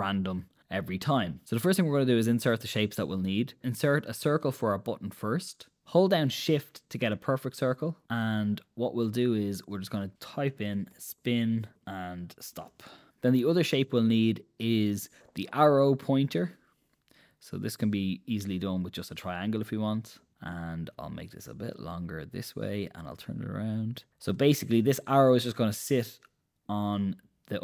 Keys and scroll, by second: 10.7-13.7 typing.